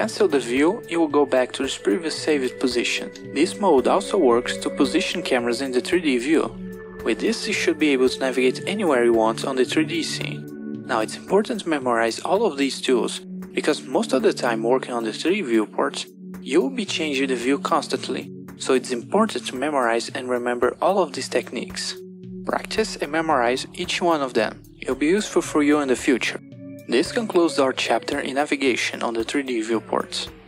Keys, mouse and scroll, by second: 2.4 f, 5.1 KP_0, 6.6 f, 9.3 KP_0, 10.6 Home.